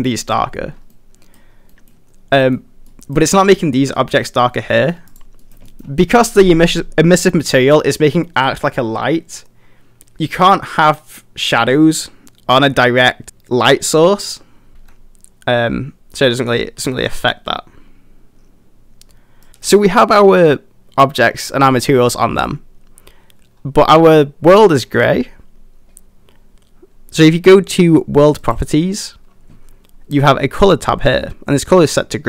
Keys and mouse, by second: 1.0 middle click, 1.8 middle click, 2.5 middle click, 2.9 middle drag, 4.8 middle drag, 5.4 middle click, 5.7 shift+middle drag, 14.7 g, 14.8 g, 22.3 middle drag, 28.5 click.